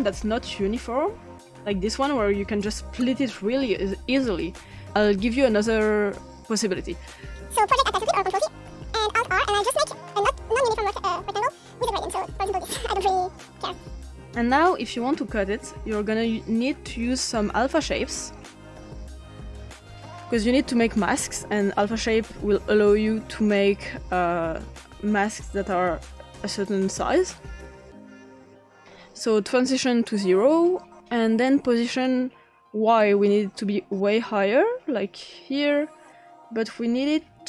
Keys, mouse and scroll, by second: 0.0 click, 2.4-3.6 drag, 7.9 ctrl+t, 9.1 alt+r, 9.6 click, 10.3 click, 11.4 click, 12.4 click, 13.1 click, 14.1-15.4 scroll down 3, 15.5 click, 16.3 click, 17.8 click, 18.5 click, 19.4 click, 19.7 click, 21.6-22.4 typing, 24.1-25.2 drag, 25.6 click, 26.0 click, 29.5-30.1 drag, 33.0-36.1 drag.